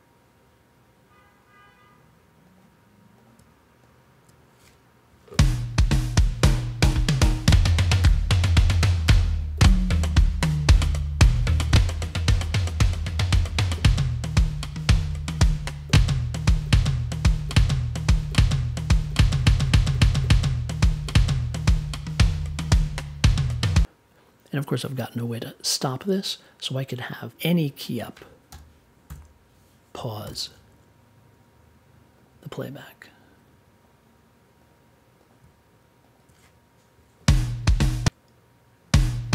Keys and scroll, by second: 25.7 space, 28.5 m, 29.0 p, 30.2 super+j.